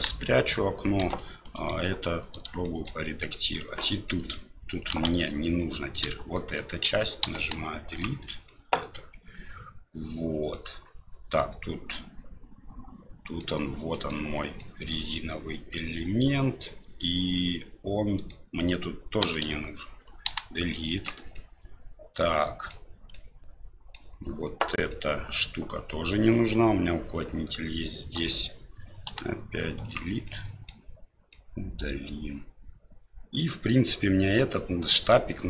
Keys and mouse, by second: 0.0 KP_1, 1.0 Tab, 1.4 right click, 1.7 Tab, 2.6 shift+middle click, 3.0 middle click, 4.0 middle click, 5.1 alt+a, 7.2 Delete, 8.5-10.5 middle drag, 11.5-13.4 middle drag, 14.0 middle click, 14.6-18.3 middle drag, 20.2 Delete, 20.2 l, 21.3-22.7 middle drag, 23.1 middle click, 24.9 middle click, 29.0 Delete, 29.0 l, 30.2 middle click, 31.3-33.4 middle drag, 34.5-35.4 middle drag.